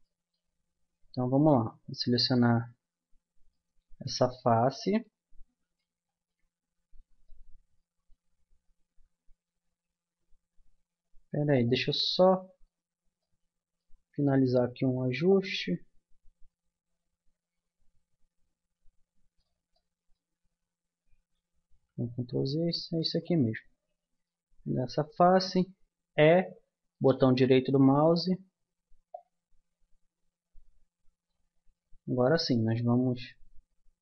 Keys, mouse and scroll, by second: 0.0 middle click, 2.1 click, 2.5 middle click, 3.1 click, 3.5 middle click, 4.9 middle click, 7.5 middle click, 7.8 middle click, 8.9 Tab, 9.5 Tab, 11.5-12.6 drag, 12.6-15.3 middle drag, 15.3-17.1 drag, 19.7 middle click, 21.5 ctrl+z, 24.1-25.9 middle drag, 26.1 e, 30.7 click, 32.3-34.0 drag.